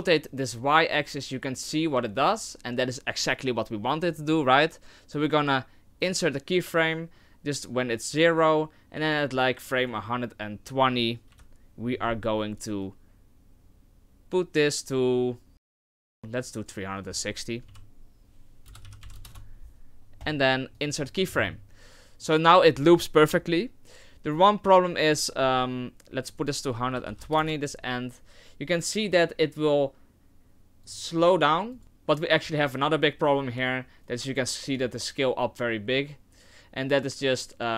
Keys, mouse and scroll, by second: 31.8 click, 33.4 click, 34.3 click.